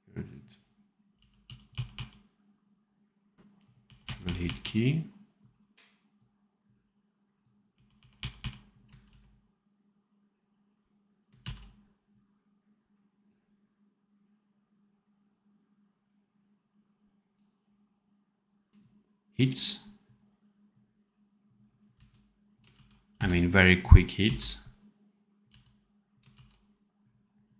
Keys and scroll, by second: 1.1 f, 1.6 r, 4.0 r, 7.6 r, 8.1 r, 9.0 ctrl+c, 11.3 ctrl+v, 18.7 ctrl+b, 21.8 c, 22.6 ctrl+z, 23.0 c, 24.2 c, 25.4 v, 26.2 ctrl+z.